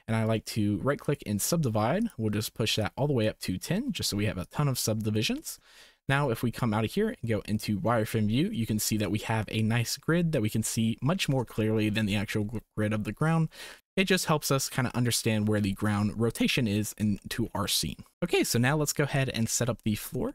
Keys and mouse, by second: 0.3 click, 2.8 click, 4.4 click, 5.3 shift+click, 5.8 Tab, 6.5 z, 8.7-9.0 shift+drag, 11.7 shift+drag, 17.2 shift+middle click.